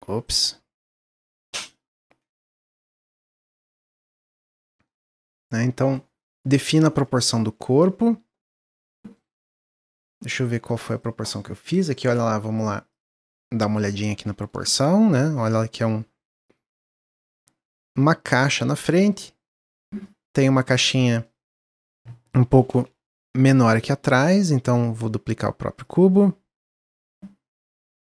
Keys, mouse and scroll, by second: 0.4-2.9 drag, 4.5-12.2 shift+middle drag, 21.2-22.5 middle drag, 22.5 shift+d, 24.6-25.9 drag.